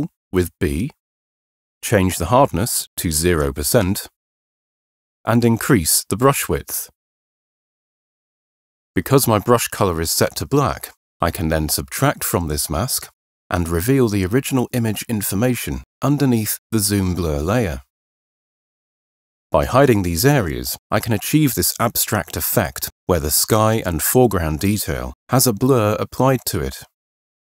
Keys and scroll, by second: 5.8 ], 6.4 ], 7.0 ].